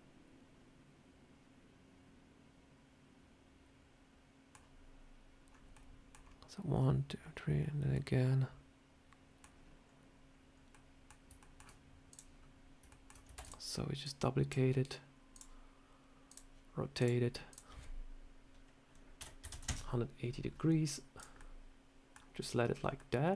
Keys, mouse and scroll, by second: 9.7-10.5 scroll up 3, 10.6 middle click, 11.1 scroll down 1, 11.3 shift+scroll up 1, 11.3 shift+middle click, 12.0 click, 12.8 shift+middle click, 13.3 shift+d, 13.9 click, 15.2 click, 16.2 click, 16.9 click, 17.4 click, 21.1 click, 21.3 middle click, 22.6 scroll down 3, 22.9 middle click.